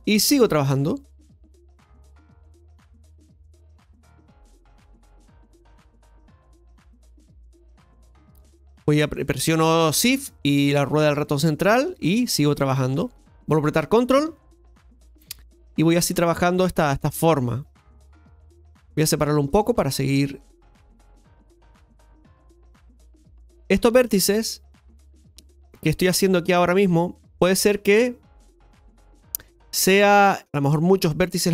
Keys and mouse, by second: 0.4 ctrl+click, 1.9 ctrl+click, 3.4 ctrl+click, 4.0-5.5 ctrl+middle drag, 6.0-8.2 ctrl+shift+middle drag, 8.4 shift+middle click, 10.3-11.8 shift+middle drag, 14.2 ctrl+click, 17.2 ctrl+click, 20.4 ctrl+click, 21.5 ctrl+click, 22.6 ctrl+click, 26.5 ctrl+click, 29.7 ctrl+click.